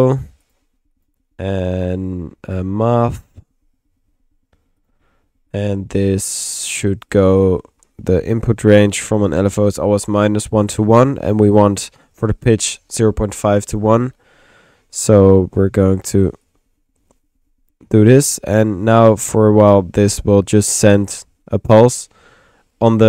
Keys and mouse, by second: 0.2-1.0 typing, 0.5-4.8 drag, 3.1 Tab, 4.6-5.3 typing, 5.5 click, 6.5 click, 7.1 click, 8.5 click, 11.3 click, 14.2 middle click, 16.4-18.2 drag, 18.6 click, 19.4 click, 20.1 middle click, 20.6 click.